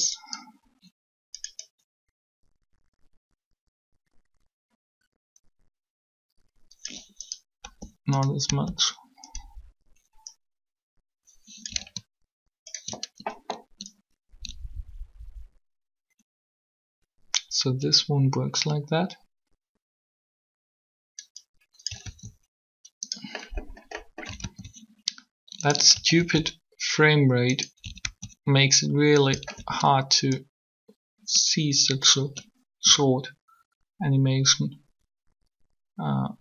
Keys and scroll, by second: 7.6 g, 8.2 g, 22.0 alt+a, 24.3 alt+a, 26.1 alt+a, 27.9 alt+a.